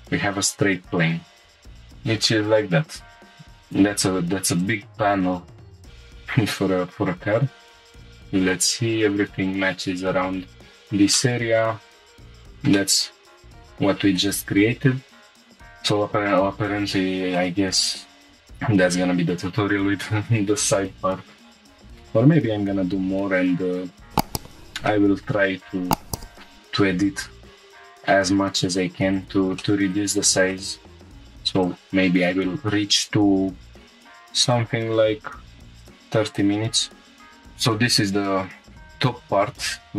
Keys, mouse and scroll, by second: 1.1 scroll down 1, 3.3 shift+middle click, 3.3 scroll down 3, 3.6 click, 4.6 click, 7.8 click, 7.8 scroll up 3, 8.7 scroll up 1, 9.7-10.2 scroll down 3, 11.1-12.2 middle drag, 12.2 scroll down 2, 12.7-14.2 middle drag, 14.3 scroll up 2, 15.4-16.9 drag, 16.9-17.2 scroll up 3, 17.3 shift+middle click, 17.9 scroll up 2, 18.2 shift+middle click, 18.5-20.3 scroll down 1, 20.3-20.8 scroll down 1, 24.3 z, 24.5 click, 24.9 shift+middle click, 25.5-26.2 scroll up 1, 26.2 click, 26.3 shift+middle click, 26.3 scroll down 2, 27.5 g, 29.1 click, 29.6 shift+middle click, 30.0 scroll up 2, 30.5 shift+middle click, 31.0 scroll up 1, 31.0 1, 31.6 click, 32.6 g, 34.0 y, 34.4-35.6 drag, 35.8-37.1 drag, 37.1 g, 37.1 s, 37.1 x, 38.7 click, 39.1 scroll down 4.